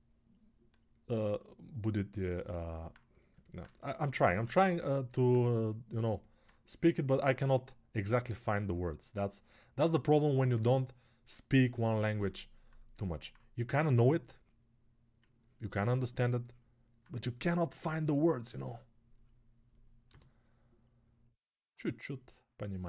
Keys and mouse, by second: 19.8 g.